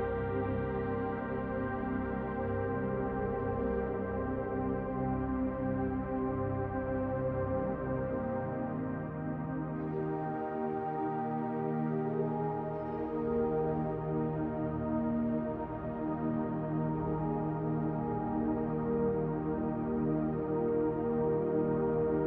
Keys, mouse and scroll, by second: 1.6 s, 3.4 click, 4.9 middle click, 5.9 shift+middle click, 7.1 click, 9.3 middle click, 10.0 shift+middle click, 10.9 KP_Decimal, 11.5-12.2 scroll down 5, 11.9 middle click, 14.8 middle click, 16.2 g, 17.8 middle click, 19.7 shift+d, 20.4 click, 21.5 click.